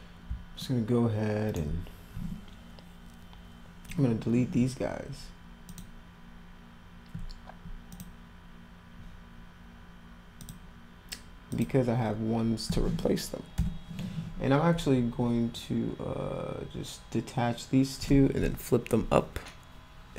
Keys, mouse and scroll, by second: 0.6-1.5 alt+middle drag, 5.7 click, 7.9 ctrl+click, 10.4 ctrl+click, 11.5 ctrl+click.